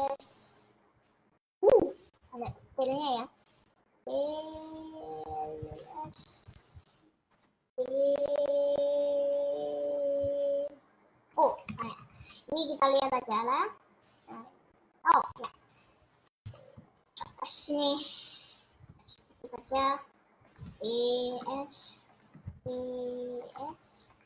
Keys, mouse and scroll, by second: 2.8 e, 6.1 s, 7.7 e, 11.0 click, 11.9 ctrl+z, 16.9 ctrl+z, 19.0 s, 20.7 e, 21.5 5, 22.4 e, 23.7 s.